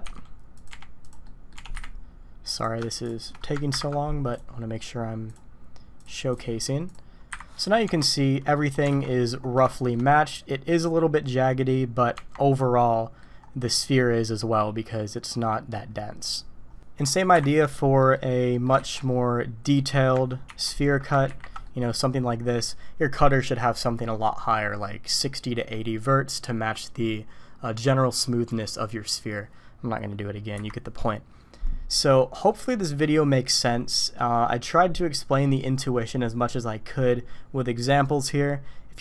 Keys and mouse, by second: 0.2 s, 0.7 g, 1.2 click, 1.6 g, 3.7 ctrl+KP_Subtract, 4.3 click, 5.3 click, 6.0 drag, 6.3 click, 6.9 click, 7.3 Delete, 7.6 click, 7.8 Tab, 8.1-8.5 drag, 8.9 alt+a, 9.1 click, 9.7 shift+middle drag, 9.8 shift+click, 10.5 drag, 12.1 Tab, 12.8-13.2 drag, 17.1 click, 17.3 Delete, 18.0 click, 18.5 click, 18.8 shift+a, 20.5 ctrl+4, 21.3 ctrl+5, 21.6 drag, 30.5 Delete.